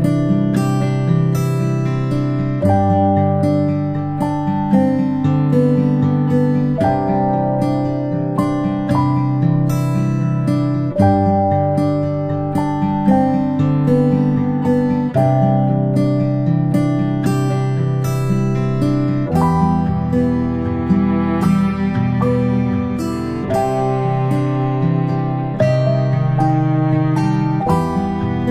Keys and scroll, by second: 3.1 g, 20.0 ctrl+space, 20.8 ctrl+space, 22.7-24.4 typing, 27.5 space, 27.8 space, 28.2 p.